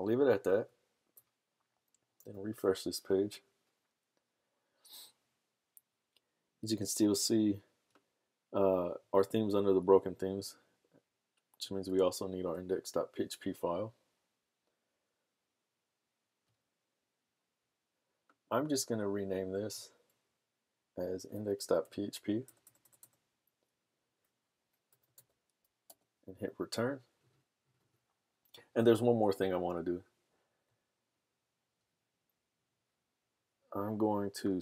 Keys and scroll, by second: 0.5 super+s, 0.7 super+Tab, 2.5 super+r, 12.0 super+Tab, 21.6-23.0 typing, 24.6-25.8 typing, 27.4 typing, 30.4 super+Tab.